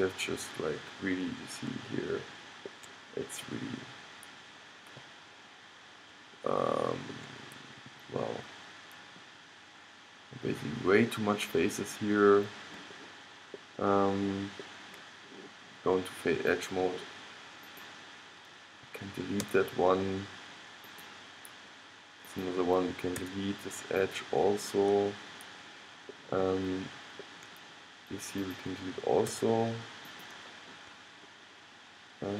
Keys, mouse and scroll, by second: 0.3-1.5 middle drag, 1.7 middle click, 2.3-6.6 middle drag, 6.7-9.9 middle drag, 10.0 middle click, 12.2 middle click, 12.3-16.2 middle drag, 16.6-17.9 drag, 19.6 x, 21.1-22.4 middle drag, 21.1-22.2 scroll up 1, 22.2 scroll up 1, 23.3 x, 24.2-25.3 middle drag, 25.4 middle click, 28.6-30.5 drag, 29.5 x.